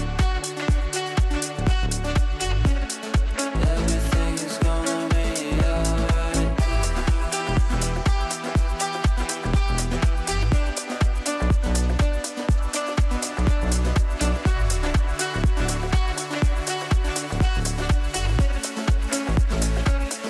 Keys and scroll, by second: 3.2 shift+Page_Down, 3.7 Escape, 17.3 6, 17.5 Return.